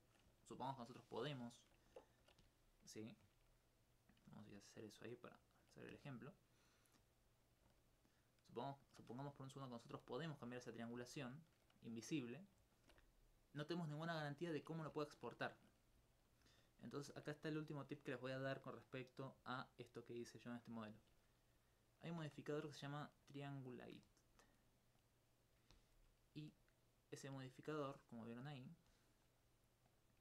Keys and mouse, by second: 0.4 alt+click, 0.6 alt+click, 3.5 right click, 4.1 click, 4.4 alt+click, 4.8 alt+click, 5.8 alt+click, 6.6 right click, 7.4 click, 7.7 alt+click, 7.8 alt+click, 9.7 click, 10.0 alt+click, 11.1 alt+click, 11.2 alt+click, 16.1 alt+click, 16.4 alt+click, 18.0 click, 22.2 Tab, 23.2-26.0 drag, 26.6 alt+click, 27.1 alt+click, 28.1 alt+click, 29.9 click.